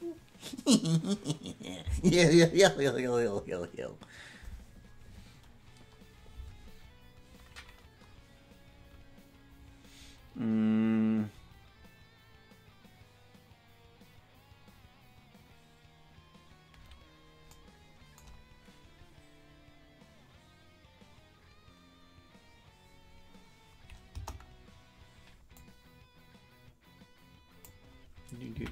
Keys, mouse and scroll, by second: 24.2 KP_0, 25.6-27.8 drag.